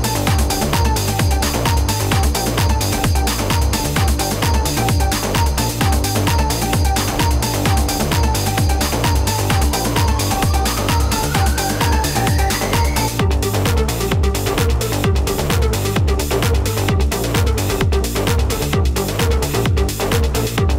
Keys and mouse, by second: 6.7 typing, 9.9 -, 11.2 click, 14.3 shift+click, 15.4 right click, 16.8 click, 18.3 click, 19.4 click, 20.2 click.